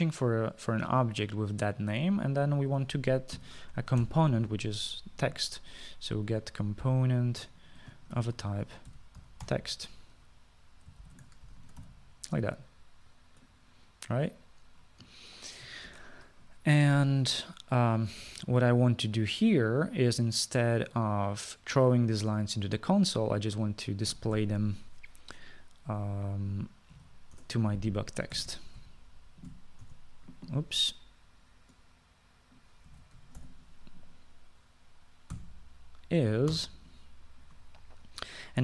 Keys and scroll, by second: 4.2-5.6 typing, 8.5 Return, 9.0-11.0 typing, 12.1-12.9 typing, 17.0 ctrl+s, 25.2 typing, 27.8-29.9 typing, 30.9 Return, 33.7-35.0 typing, 37.6 =.